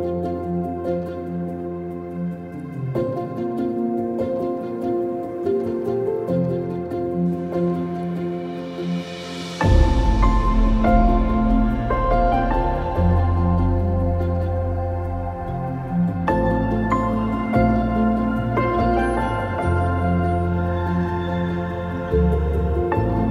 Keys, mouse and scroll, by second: 0.5-2.1 middle drag, 0.6-2.0 scroll down 2, 2.0 scroll down 1, 2.1 click, 2.7 middle click, 2.8-4.6 drag, 4.7-5.9 drag, 6.1-8.1 drag, 8.1-8.4 middle drag, 8.4 click, 8.7 middle click, 8.9 click, 9.2 middle click, 9.3 click, 9.5-10.5 middle drag, 10.5-12.0 drag, 12.0-12.7 middle drag, 12.7-16.5 drag, 16.4 ctrl+z, 16.5 shift+right click, 18.2 middle click, 18.7 click, 18.9 shift+middle click, 19.0 click, 19.4 middle drag, 19.7 middle click, 19.8 click, 21.1 click, 21.7 click, 22.8 click.